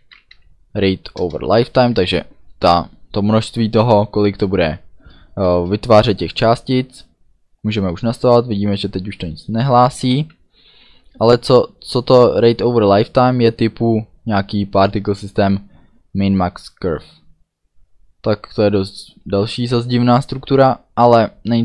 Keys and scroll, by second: 0.0-1.9 typing, 1.1 Return, 5.5 space.